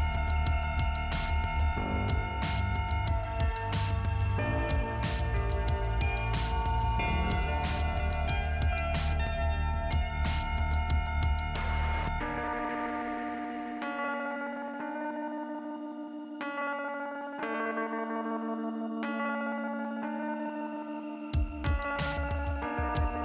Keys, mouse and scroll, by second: 0.8 click, 2.4 click, 3.9 middle click, 6.4 click, 11.1 click, 13.3 ,, 14.9 scroll down 1, 16.7-17.8 scroll up 2.